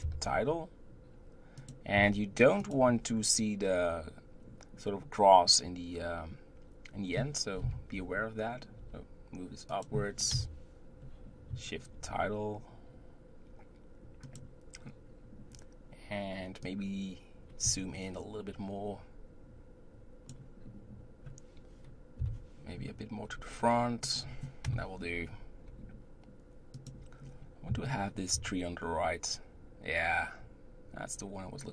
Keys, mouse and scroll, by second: 2.0 g, 7.6 KP_1, 8.4-8.8 scroll down 2, 8.8 g, 10.3 KP_0, 16.6-19.6 drag, 22.2 KP_7, 23.3 g, 24.6 KP_0, 25.7 g.